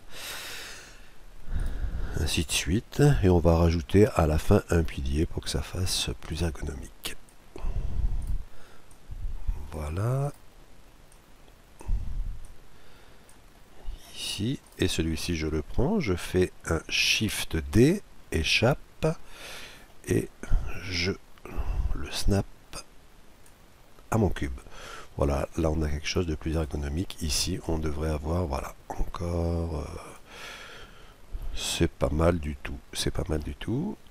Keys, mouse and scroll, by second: 0.4 middle click, 1.5-3.3 right drag, 2.5-4.2 drag, 6.3-7.9 drag, 8.2-9.9 right drag, 8.9-10.5 drag, 10.2-11.8 right drag, 11.1-14.1 drag, 13.5-15.1 middle drag, 14.6-16.5 right drag, 17.6 shift+d, 19.5-21.3 middle drag, 20.9-22.6 drag, 24.4-26.1 drag, 25.5-27.0 middle drag, 26.5-28.1 right drag, 27.6-29.4 drag, 30.4-33.7 middle drag, 33.8 middle click.